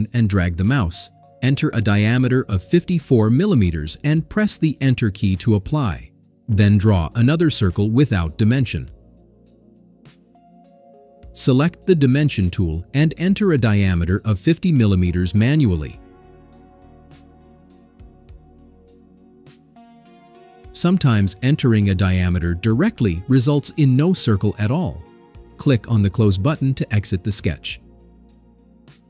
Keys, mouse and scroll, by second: 0.7 click, 2.6 5, 2.9 4, 4.3 Return, 6.0 click, 9.6 click, 13.6 click, 14.5 click, 16.1 click, 18.5 5, 19.1 0, 21.9 Return, 27.9 click.